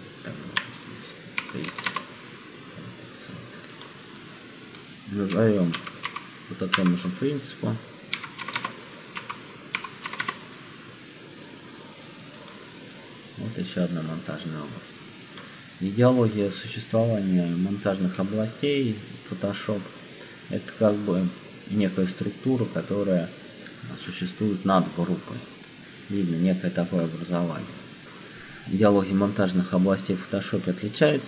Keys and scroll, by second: 0.4 Tab, 1.1-2.3 typing, 5.7 shift+m, 6.0 o, 6.6 -, 7.8-10.7 typing.